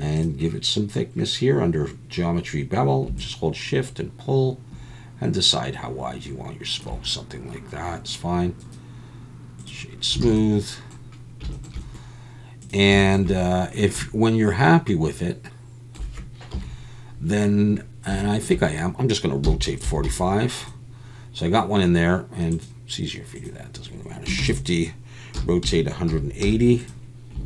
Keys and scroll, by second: 10.2 alt+a, 16.5 KP_7, 19.4 r, 19.8 4, 20.0 5, 24.4-26.4 typing.